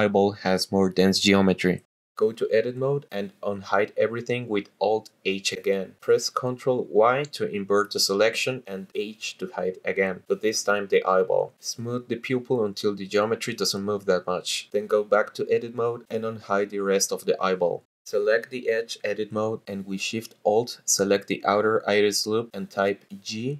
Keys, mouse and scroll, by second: 0.3 middle click, 1.0 middle click, 1.2 shift+click, 2.9 click, 4.8 alt+h, 7.2 ctrl+i, 8.4 h, 11.0-12.2 scroll up 1, 12.2 scroll up 1, 12.3 click, 13.4 shift+click, 14.9 shift+click, 15.2 middle click, 15.6 shift+click, 16.4 middle click, 17.0 click, 17.8 alt+h, 18.7 Escape, 18.7 KP_0, 18.7 l, 18.7 BackSpace, 18.7 ctrl+z, 22.0 alt+shift+click, 23.2-23.5 typing.